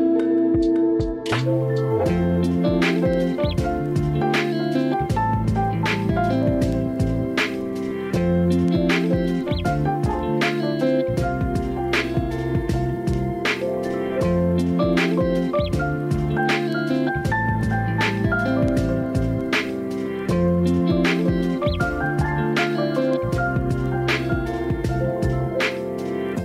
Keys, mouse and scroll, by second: 3.5 ctrl+z, 12.7 g, 13.7 g, 14.7 g, 15.6 g, 17.0 g, 20.4 g, 22.0 click, 22.2 g, 24.0-26.4 shift+middle drag.